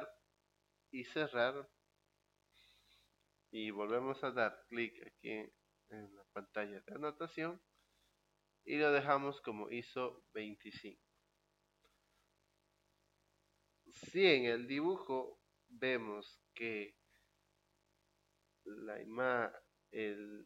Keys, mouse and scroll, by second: 1.2 click, 7.0 click.